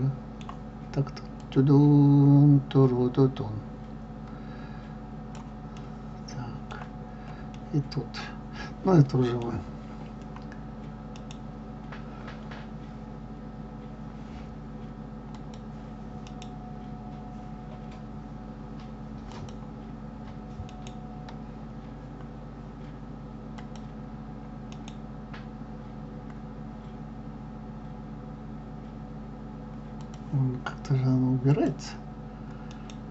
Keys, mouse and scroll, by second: 1.2-4.3 drag, 5.7-15.3 middle drag, 15.3-33.1 drag.